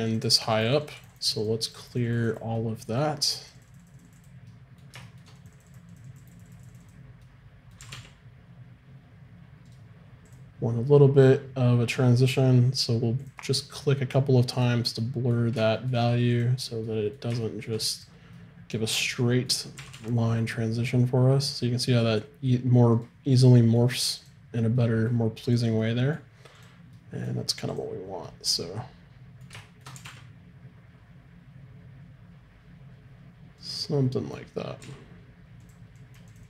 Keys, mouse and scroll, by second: 2.6-4.5 middle drag, 7.4-8.6 drag, 7.8 r, 8.6 middle click, 10.3-12.4 drag, 13.2 click, 13.8-15.7 middle drag, 16.8 click, 17.0-19.8 drag, 19.8 r, 23.6-28.6 middle drag, 24.2-29.9 drag, 29.9 r, 33.9-36.0 middle drag, 34.8 f, 36.0-36.4 drag.